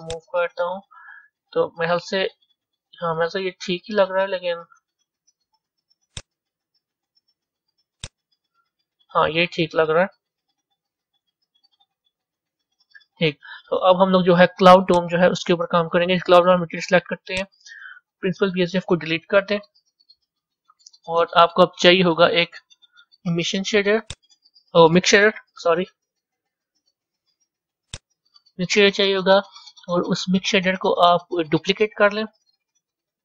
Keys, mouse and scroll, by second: 0.0-2.5 drag, 2.5 a, 3.1-6.0 middle drag, 6.0-9.2 drag, 9.4 click, 9.6-14.9 middle drag, 14.9 click, 17.3 click, 18.5 Delete, 33.0 shift+d.